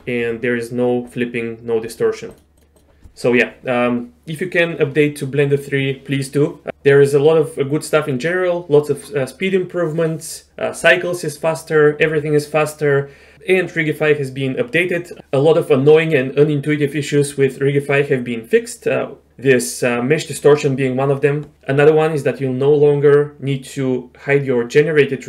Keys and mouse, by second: 2.6-2.9 drag.